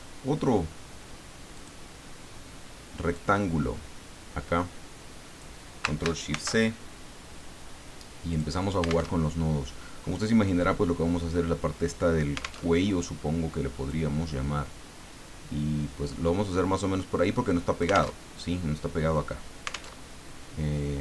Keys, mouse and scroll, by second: 1.5 click, 3.1-5.6 drag, 6.3 ctrl+shift+c, 8.3 click, 9.1 alt+Tab, 12.6 alt+Tab, 13.9-18.2 drag, 18.2 alt+Tab, 19.9 alt+Tab.